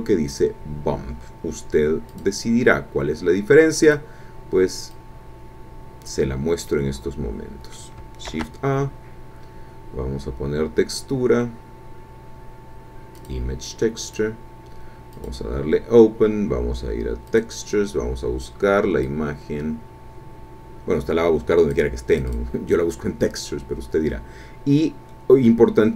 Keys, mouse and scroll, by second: 2.1 click, 3.8 click, 4.9-6.3 drag, 6.7-7.9 middle drag, 8.3 shift+a, 13.1 click, 14.1 click, 15.1 click, 17.3 click, 17.9-18.5 scroll down 2, 19.0-21.9 drag, 22.1 click.